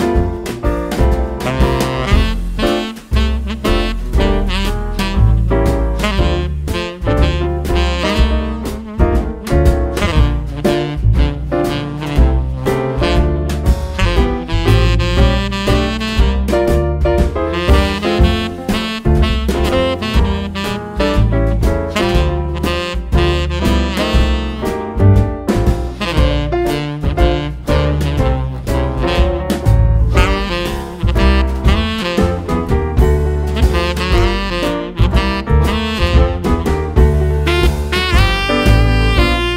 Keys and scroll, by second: 0.9 super+c, 1.1 super+v, 3.6 super+c, 3.7 super+v, 6.7 ctrl+d, 19.9-22.0 typing, 22.2 Return, 23.5 typing, 24.0 Return, 25.5 typing, 25.9 Return, 28.5 typing, 28.8 super+c, 29.0 super+v.